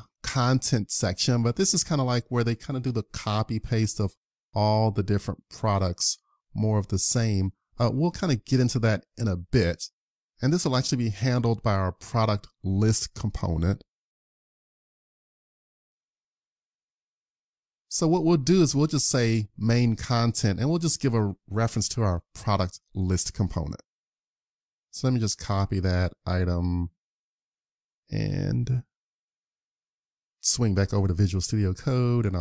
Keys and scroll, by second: 20.1 super+c, 29.5 super+Tab, 31.7 super+v.